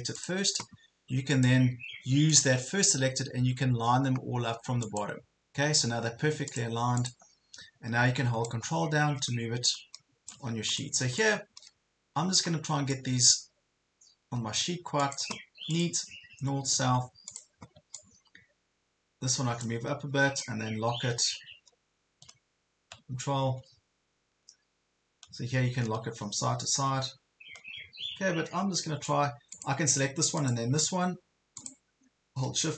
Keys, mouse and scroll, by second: 0.2 shift+click, 3.8-10.3 drag, 10.7 click, 11.2 ctrl+click, 12.9-14.6 ctrl+drag, 15.1-29.5 drag, 31.7 click.